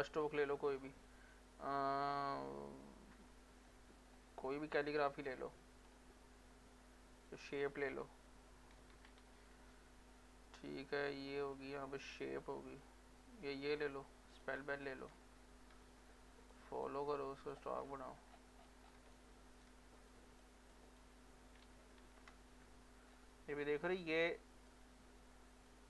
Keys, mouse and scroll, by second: 3.2-4.9 scroll down 1, 4.9-7.3 scroll up 1, 7.3 click, 8.5-9.7 typing, 11.6-13.4 scroll up 1, 14.3 click, 15.3 ctrl+scroll up 1, 16.5 click, 17.3 click, 17.8 scroll up 1, 18.3 scroll down 1, 18.9 scroll down 1, 19.1 ctrl+right click, 20.1 click, 21.7 ctrl+z, 23.1 scroll up 1, 24.0 click, 24.1-25.7 drag, 25.7-25.8 drag.